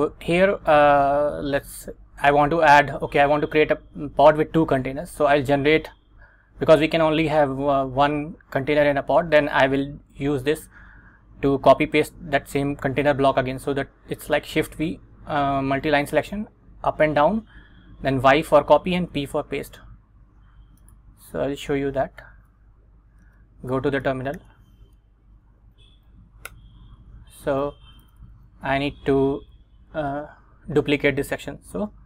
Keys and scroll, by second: 22.5 super+Tab, 23.4 Return, 24.5 super+v, 25.7 Up, 26.6 Return, 28.0 Down, 29.0 Down, 29.5 Down.